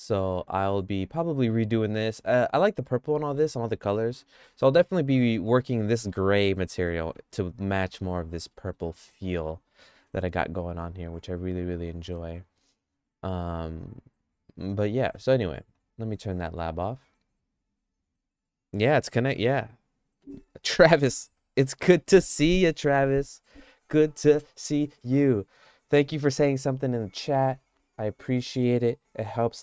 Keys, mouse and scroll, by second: 0.4 middle click, 1.9 middle click, 3.1 middle click, 4.9 middle click, 6.1 middle click, 6.8 middle click, 8.5 middle click, 15.0 middle click.